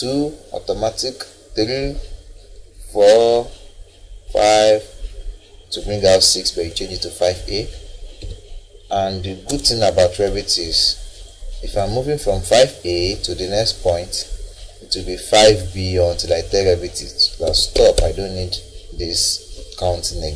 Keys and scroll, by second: 8.2 5, 9.5 Caps_Lock, 10.3 a.